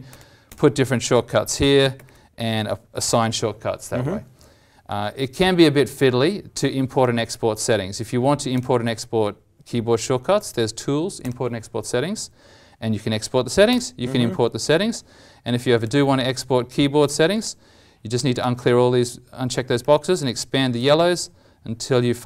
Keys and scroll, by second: 2.0 ctrl+shift+Insert.